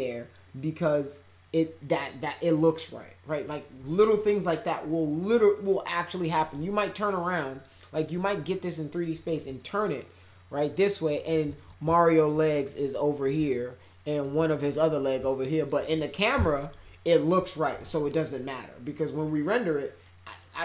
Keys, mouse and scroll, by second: 2.2-2.6 middle drag, 3.3 middle click, 7.5 middle click, 9.5-11.1 alt+middle drag, 11.5 alt+middle click, 11.9 alt+middle click, 13.5 alt+middle click, 15.2 alt+middle click, 15.9 middle click, 16.3 c.